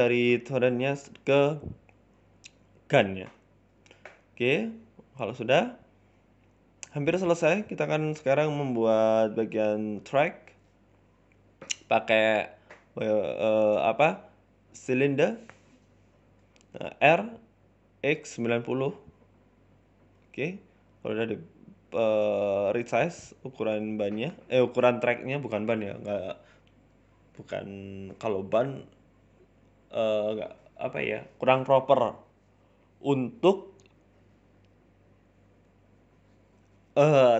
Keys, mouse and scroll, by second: 0.3 scroll down 9, 0.5 middle click, 0.8-1.7 scroll up 2, 1.1 KP_1, 1.7 shift+middle click, 1.9-2.3 scroll up 4, 2.2 middle click, 2.7 scroll down 5, 2.9 middle click, 3.5 scroll down 1, 3.7 middle click, 4.1 scroll up 1, 4.3 shift+middle click, 4.7 middle click, 6.1 KP_1, 6.6 shift+middle click, 6.9 scroll up 3, 7.1 shift+middle click, 9.8 scroll down 2, 10.0 shift+middle click, 10.7 shift+a, 12.3 z, 13.6 shift+middle click, 13.9 scroll up 4, 14.1 shift+middle click, 14.5 shift+a, 16.4-17.0 scroll down 2, 17.0 g, 18.6-19.1 scroll up 1, 19.1-20.0 scroll up 1, 19.1 r, 20.6 s, 21.9 scroll up 3, 22.2 s, 22.8 g, 23.6 s, 24.2 middle click, 24.5-25.0 scroll down 4, 24.6 middle click, 25.3-25.6 scroll up 1, 26.0 scroll down 2, 26.2 Tab, 26.6 g, 28.1 s, 31.6 shift+middle click, 31.9-33.2 scroll up 3, 32.1 middle click, 33.2 scroll up 1, 33.2 click, 33.7-34.0 scroll down 5, 34.0 scroll up 1, 34.3 middle click, 34.7 click, 35.3-35.9 scroll up 2, 36.2 middle click, 36.8 ctrl+alt+q.